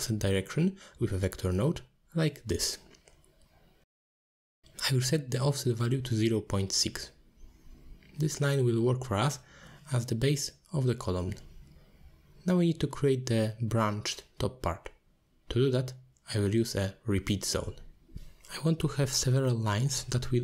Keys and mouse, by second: 0.0 click, 0.6 middle click, 0.9 shift+a, 4.3 click, 5.1-5.7 drag, 5.9 click, 6.8 click, 7.5-8.9 drag, 10.1 middle drag, 11.2-12.8 drag, 14.6 click, 15.1 middle click, 15.5 ctrl+s, 19.2 middle click.